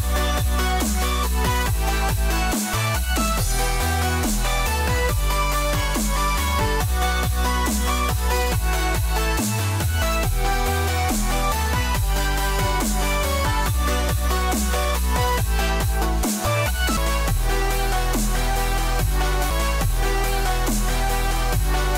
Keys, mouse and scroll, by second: 0.3 click, 2.3 alt+click, 4.2 click, 6.7 alt+click, 7.2 click, 12.2 click, 13.7 click, 15.8 click, 16.4 click.